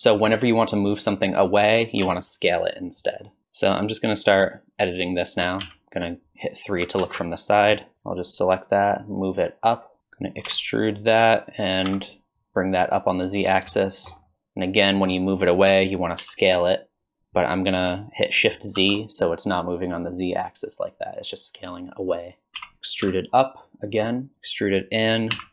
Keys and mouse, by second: 2.0 s, 5.6 KP_3, 7.0 alt+z, 8.8-10.0 drag, 10.0 KP_1, 10.0 KP_3, 10.5 e, 13.8 shift+middle click, 14.3 middle click, 16.2 s, 22.5 KP_2, 22.5 KP_3, 22.6 e.